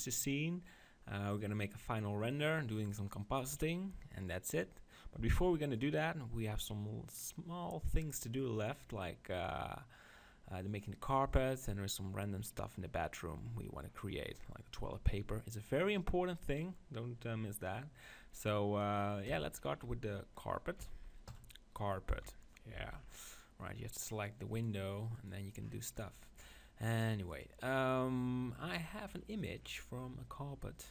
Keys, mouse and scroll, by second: 21.3 click, 22.1 KP_7, 22.3 click, 22.7 z, 23.1-24.1 middle drag, 24.1 click, 28.6 click, 29.1-30.9 middle drag.